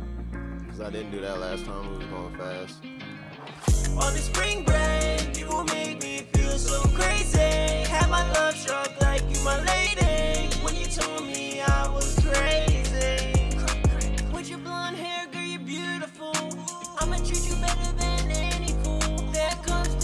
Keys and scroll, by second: 0.2-0.9 typing, 10.4-11.2 typing, 14.0-14.8 typing, 17.3-19.4 typing.